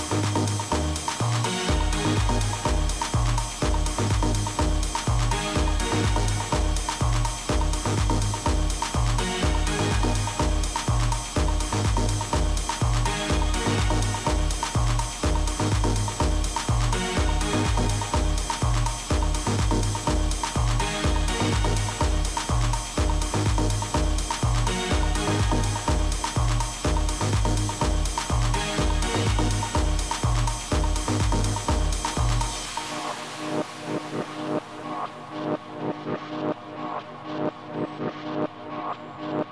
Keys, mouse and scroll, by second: 3.4-6.1 middle drag, 6.2 KP_3, 7.7 r, 27.1 middle click, 27.8 a, 31.5-33.4 right drag, 37.0-38.9 drag.